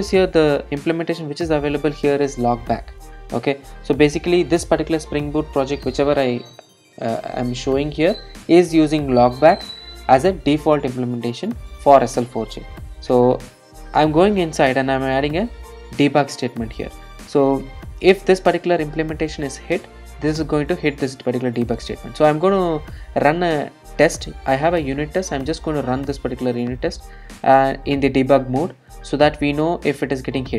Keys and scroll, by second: 26.6 ctrl+d.